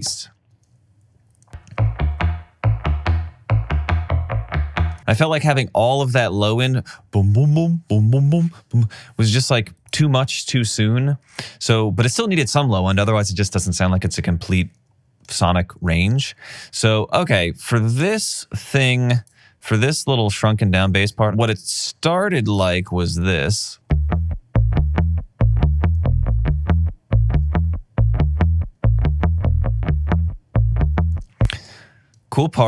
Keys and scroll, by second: 0.6 space, 23.8 space, 31.2 space.